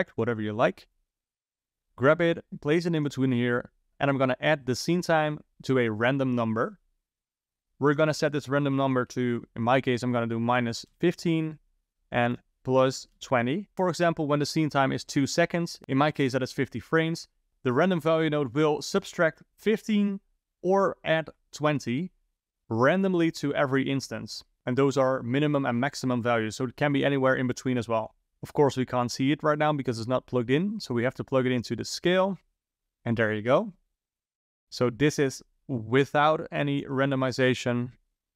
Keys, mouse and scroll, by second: 0.9 click, 2.7 click, 4.1 click, 5.7 click, 7.7-10.9 drag, 12.2-13.7 drag, 13.7 shift+Down, 28.3 middle click, 29.1 click, 31.2 click, 34.6 ctrl+Right, 35.6 click, 37.9 scroll up 1, 38.0-38.3 drag.